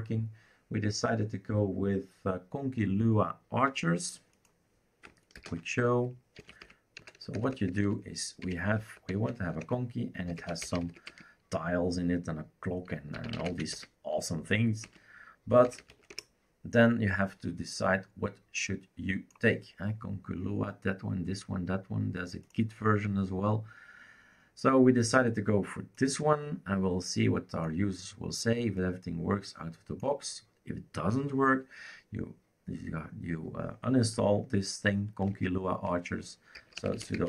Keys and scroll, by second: 5.4 ctrl+alt+t, 6.1-11.3 typing, 12.9-17.0 typing, 35.3 ctrl+c, 36.3-37.2 typing.